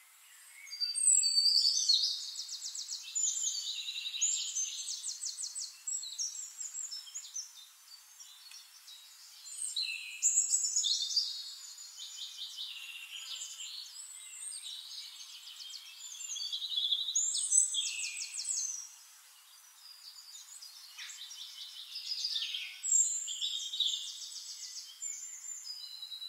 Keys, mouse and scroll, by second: 0.2 click, 0.7 click, 3.3 middle click, 4.0 click, 6.4-8.0 drag, 9.3 ctrl+z, 11.4 click, 12.1 click, 14.6 shift+-, 15.4 click, 16.3 click, 17.2-19.0 drag, 19.2 ctrl+middle click, 21.1 click, 22.5-24.0 ctrl+drag, 25.0 click, 26.0 click.